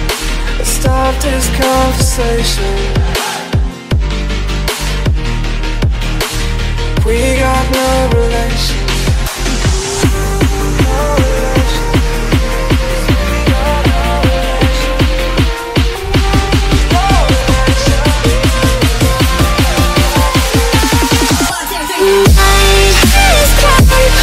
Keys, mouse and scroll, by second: 1.4 click, 1.8 ctrl+click, 2.4 middle click, 2.5 middle click, 3.5 click, 4.0 z, 4.3-5.1 scroll, 5.3 middle click, 5.4 middle click, 6.3 scroll, 7.3 click, 7.7 ctrl+z, 8.2 click, 9.4 click, 9.7-10.1 typing, 10.6 middle click, 10.7 middle click, 11.1 click, 11.5 click, 12.7 z, 13.3 middle click, 13.8 middle click, 14.3 middle click, 16.4 click, 17.0 click, 18.8 click, 19.1 alt+Tab, 20.9 i, 22.6 alt+click, 23.9 click.